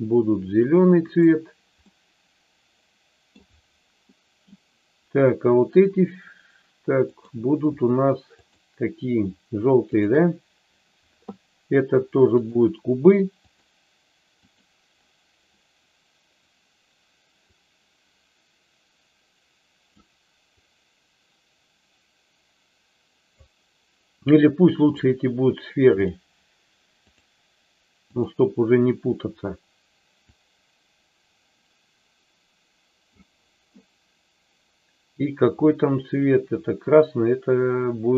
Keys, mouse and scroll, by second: 0.9 click, 1.8-3.3 middle drag, 4.0 middle click, 6.9 click, 8.4 shift+click, 12.3-13.6 drag, 14.6 click, 17.6-19.9 drag, 20.5-23.4 drag, 24.9 click, 26.1-27.3 drag, 30.2-33.2 drag.